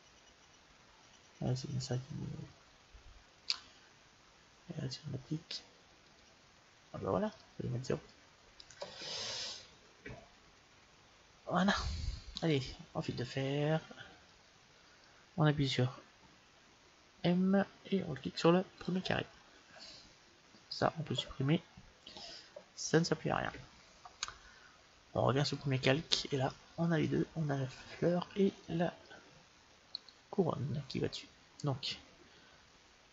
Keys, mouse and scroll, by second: 5.9-7.8 drag, 7.2-9.5 middle drag, 10.3-11.5 scroll up 1, 11.5-12.0 scroll down 1, 12.3-14.1 drag, 14.3-16.5 middle drag, 17.0 m, 20.6-22.3 right drag, 22.0 Delete, 25.6-27.4 drag, 26.4-28.2 middle drag, 29.8-31.7 right drag.